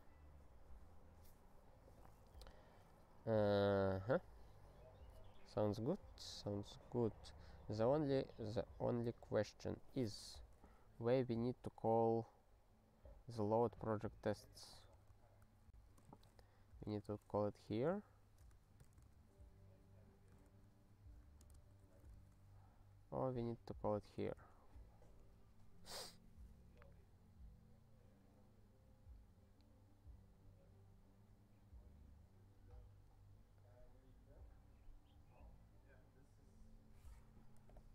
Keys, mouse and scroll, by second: 11.9-12.7 scroll up 3, 13.2-14.4 scroll up 1, 14.4 click, 14.5 click, 14.9 ctrl+p, 15.1 ctrl+e, 15.4 Return, 16.0-19.5 typing, 20.5 Return, 21.2 ctrl+a, 21.4 ctrl+space, 21.4 ctrl+n, 21.8 ctrl+w, 22.1 ctrl+s, 22.9-23.6 scroll down 1, 23.6 click, 23.7 click, 24.3 Return.